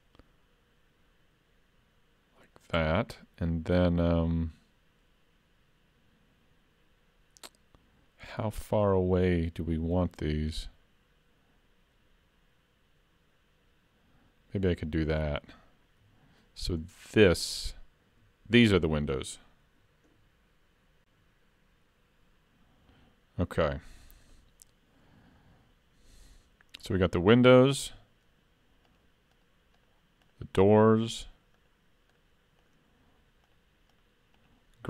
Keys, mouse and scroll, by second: 10.1 ctrl+r, 16.0 3, 16.4 click, 17.1 shift+click, 28.9 shift+click.